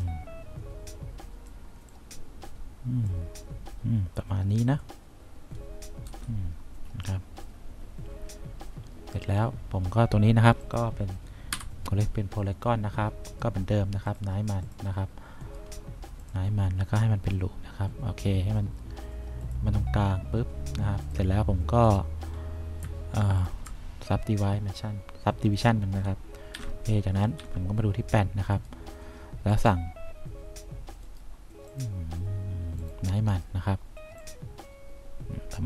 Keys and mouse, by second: 1.1 click, 2.0-3.2 drag, 6.2 F1, 11.7 c, 15.5 right click, 16.3 click, 26.7 F3, 27.5 F2, 31.2 right click, 31.8 click.